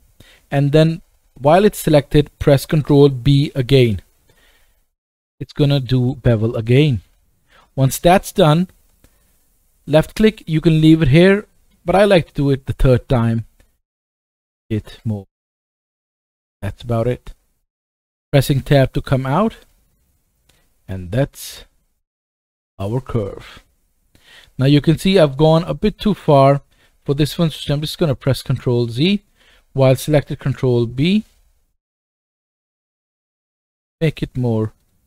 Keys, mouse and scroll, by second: 3.6 ctrl+b, 4.7-8.0 right drag, 11.5-22.0 ctrl+right drag, 12.7 ctrl+b, 18.6 Tab, 19.2 click, 19.9-20.6 scroll down 1, 20.6 middle click, 22.0 middle drag, 22.8-25.0 middle drag, 25.6-30.4 middle drag, 25.6-26.8 scroll up 1, 26.8 scroll up 1, 27.1 ctrl+z, 27.5 ctrl+z, 28.0 ctrl+z, 30.4 ctrl+b.